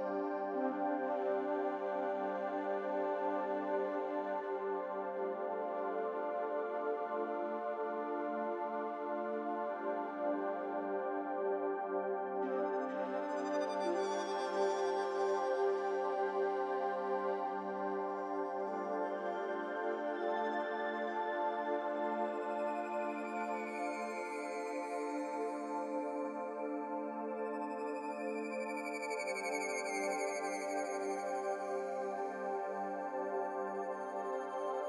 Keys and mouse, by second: 2.0 s, 3.3 g, 10.6 Tab, 12.4 Tab, 12.4 s, 16.7 g, 23.0 s, 32.4 click.